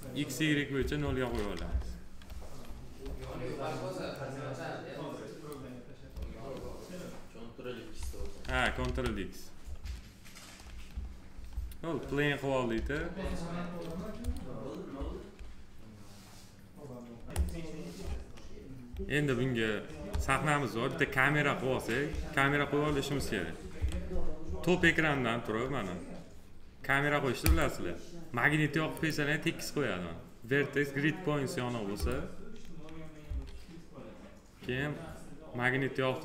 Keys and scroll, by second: 0.6 s, 2.8 s, 8.2 ctrl+x, 12.5 s, 23.5 t, 33.0 s.